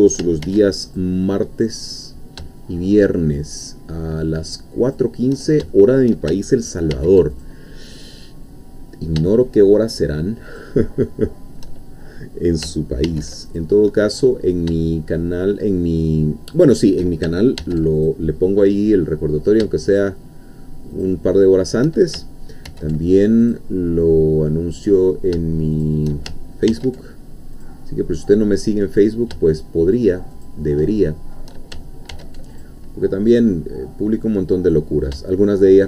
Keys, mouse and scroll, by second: 0.4 ctrl+r, 1.0 ctrl+click, 4.8 shift+click, 5.7 shift+middle click, 6.9 ctrl+r, 7.4 ctrl+click, 10.5 shift+click, 11.0-12.1 shift+middle drag, 13.1 ctrl+r, 13.5 ctrl+click, 16.6 shift+click, 17.6 ctrl+r, 18.0 ctrl+click, 20.9 shift+click, 21.3 shift+middle click, 22.7 ctrl+r, 23.5 click, 25.8 shift+click, 26.7 ctrl+r, 27.6 click, 30.4 shift+click, 30.8 shift+middle click, 32.1 ctrl+r, 32.5 ctrl+click.